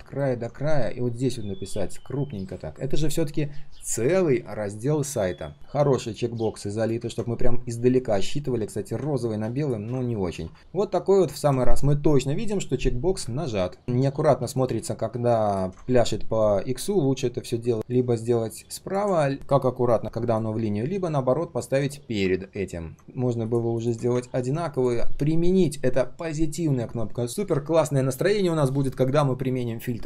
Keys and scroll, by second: 16.9 alt+h, 17.7 ctrl+z, 22.3 ctrl+z.